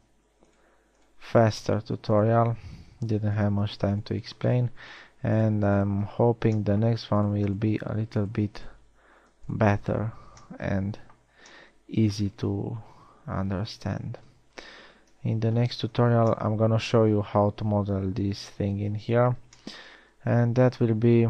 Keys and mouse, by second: 0.4 f, 3.3 f, 7.0 f, 10.5-11.7 middle drag, 12.1 f, 12.5-13.7 middle drag, 15.9 KP_1, 16.7 z, 21.0 z.